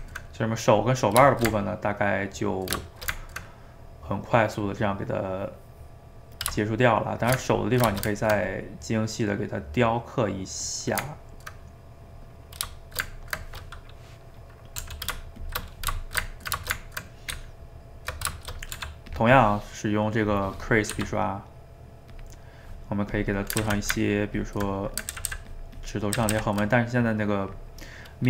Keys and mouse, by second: 7.2 shift+right click, 7.4-8.6 ctrl+middle drag, 8.6 click, 9.0-12.8 middle drag, 12.8 shift+right click, 13.1-14.9 ctrl+middle drag, 14.9 r, 15.7 middle click, 16.0 shift+right click, 16.2-17.3 ctrl+middle drag, 17.3 Tab, 18.4 shift+middle click, 18.8 f, 20.3 click, 21.0 f, 22.4 middle click, 23.1 click, 23.6 ctrl+z, 24.0 ctrl+click, 24.8 middle click, 25.1 ctrl+z, 25.3 ctrl+z, 25.5 ctrl+click, 26.2 ctrl+z, 26.3 ctrl+z, 28.0 middle click.